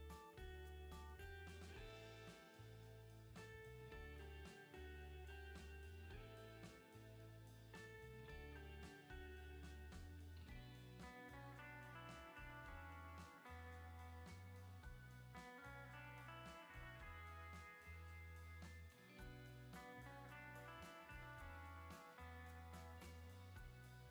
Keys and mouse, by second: 0.9-3.4 shift+middle drag, 8.0 ctrl+z, 9.9 ctrl+z, 11.1-12.2 middle drag, 12.2 ctrl+z, 12.5 click, 16.8 click, 17.1 ctrl+z, 18.9 ctrl+z, 19.5 ctrl+z, 21.6 shift+middle click, 21.9-23.2 shift+middle drag, 23.4 shift+middle click.